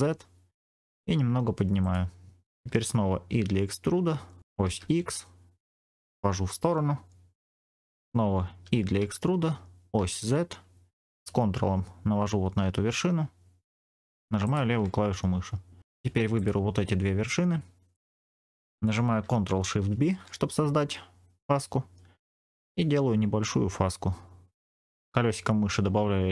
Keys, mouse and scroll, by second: 1.7 click, 2.4 scroll up 1, 3.2 e, 4.5 x, 7.6 click, 8.5 e, 9.8 z, 14.3 ctrl+click, 16.2 click, 17.8 shift+click, 19.8 ctrl+shift+b, 22.5-23.0 scroll up 1, 23.8-26.3 scroll up 1.